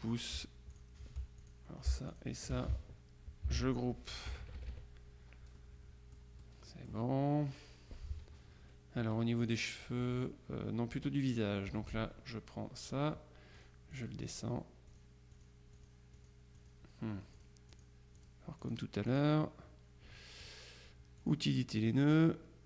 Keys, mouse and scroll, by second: 0.8 shift+click, 1.5 shift+click, 2.2 click, 3.5 ctrl+g, 4.4 KP_Subtract, 5.7-6.7 drag, 9.1 F2, 9.5 click, 10.1 F1, 11.0 F2, 11.3 click, 11.8 F1, 13.6-15.0 drag, 15.4-17.3 drag, 17.4-19.7 drag, 21.3 click.